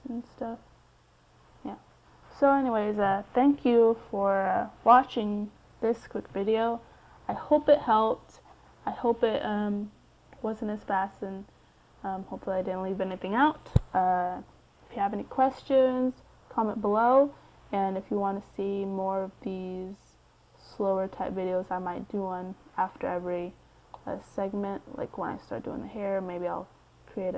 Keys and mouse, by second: 4.3-7.2 middle drag.